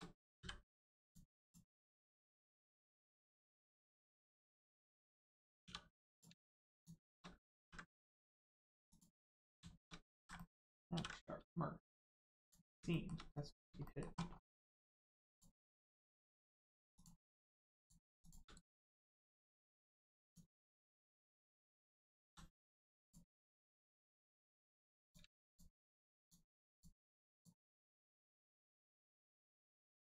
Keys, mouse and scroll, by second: 1.0 click, 1.8 middle click, 4.1 middle click, 5.6 2, 6.0 click, 6.7 shift+click, 7.6 ctrl+e, 8.8 click, 9.3 middle click, 10.1 ctrl+z, 10.3 middle click, 10.9 ctrl+e, 12.3 click, 12.9 shift+middle click, 13.2 middle click, 13.3 middle click, 13.8 shift+middle click, 14.2 scroll up 1, 15.3 click, 15.8 right click, 16.9 click, 18.1 shift+click, 18.5 right click, 18.5 right click, 20.2 click, 20.6 shift+middle click, 21.0 middle click, 21.1 middle click, 22.2 ctrl+z, 22.6 middle click, 23.0 click, 23.3 middle click, 24.3 scroll up 1, 25.0 click, 25.4 shift+click, 26.2 click, 26.7 shift+click, 27.3 shift+click, 28.6 right click.